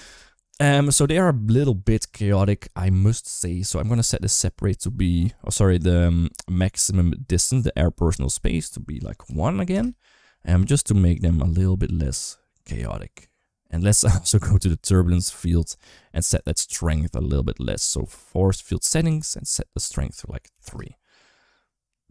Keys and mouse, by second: 8.0-9.5 drag, 11.0 click, 11.2 space, 18.3 click, 19.6 click.